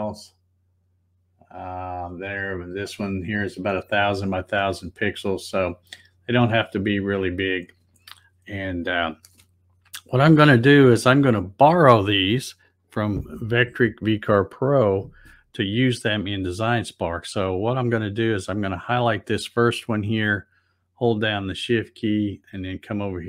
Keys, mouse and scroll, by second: 0.1 click, 6.8 click, 18.7 click, 23.1 shift+click.